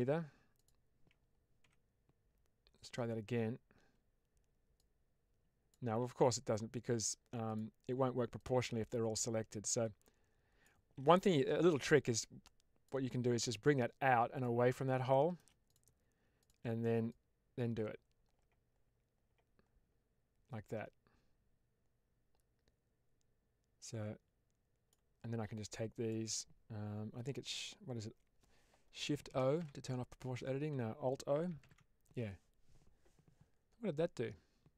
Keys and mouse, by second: 4.6 click, 5.9 ctrl+z, 8.3-10.5 drag, 10.9 ctrl+z, 11.8 click, 13.5 click, 15.0 shift+middle click, 17.0-24.8 drag, 25.5 click, 29.5 shift+o, 31.5 alt+o.